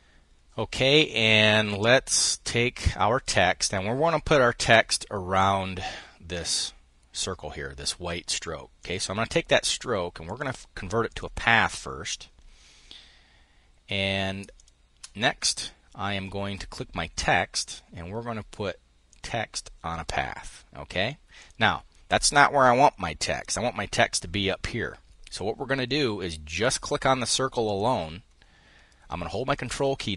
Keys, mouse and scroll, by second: 8.4 click, 9.9 click, 10.7 click, 14.1 shift+click, 17.2 click, 18.7 click, 20.9 click, 26.1 click, 27.2 click, 29.2-30.1 ctrl+drag.